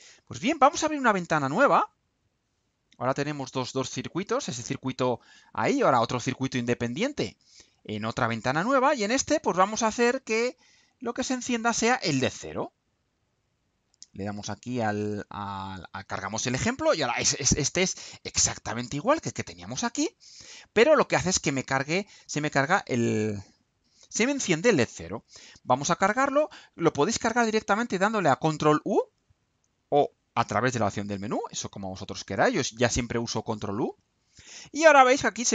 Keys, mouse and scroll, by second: 1.8 click, 4.0-5.8 drag, 6.9 click, 8.3 click, 10.4 click, 15.2 click, 18.0 click, 19.0 click, 20.2 click, 21.0-22.6 drag, 28.0 ctrl+u.